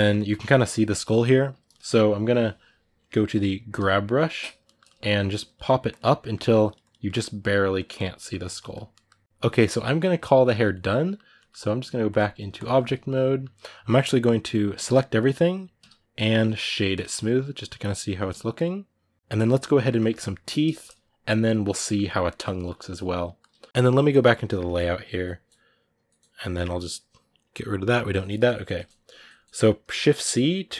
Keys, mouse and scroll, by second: 3.6 g, 3.9-5.3 middle drag, 5.3 click, 6.0 ctrl+middle click, 6.5 click, 6.8 middle click, 7.2 click, 7.9-9.1 middle drag, 9.1 click, 9.2-12.6 middle drag, 12.6 click, 12.8-14.5 middle drag, 14.5 a, 15.6 a, 16.8 w, 18.1 a, 18.4-24.6 middle drag, 24.6-27.7 drag, 27.7 middle click, 28.1 scroll up 1, 28.1-29.7 middle drag, 29.7 shift+c, 30.0 middle click, 30.5 click.